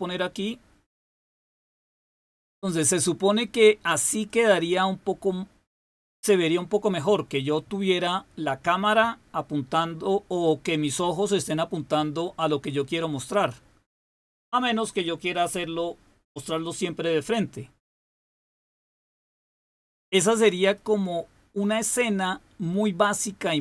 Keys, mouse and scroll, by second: 2.6 click, 4.1-6.3 drag, 19.6 click, 23.3 click.